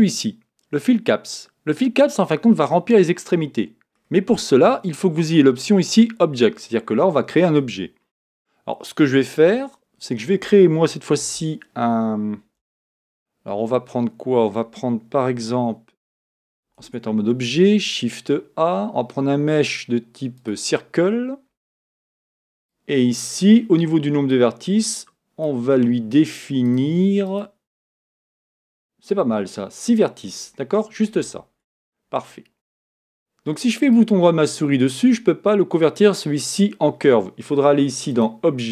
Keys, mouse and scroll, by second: 8.1 KP_1, 9.4 KP_7, 11.2 shift+a, 16.8 Tab, 17.5 shift+a, 22.6-31.3 drag, 33.8-38.1 right drag, 38.1 click.